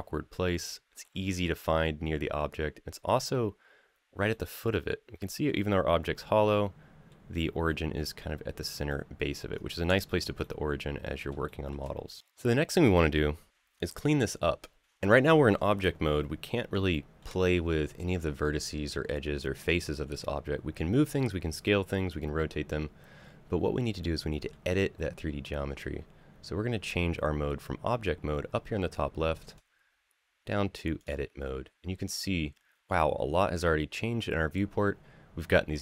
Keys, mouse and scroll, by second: 2.6-4.1 scroll up 2, 4.1-5.2 middle drag, 6.2-6.9 middle drag, 7.4 middle click, 8.7-9.3 middle drag, 9.3-9.6 scroll down 2, 9.8 shift+middle click, 10.2-11.1 middle drag, 11.2 shift+middle drag, 16.7 shift+middle drag, 23.8 middle click, 29.3-30.9 drag.